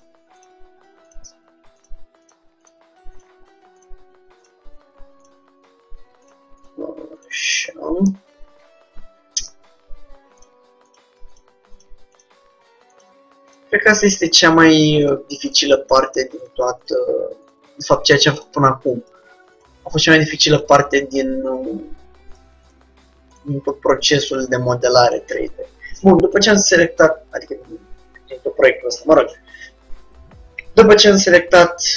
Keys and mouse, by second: 9.6 middle click, 10.6-26.5 drag.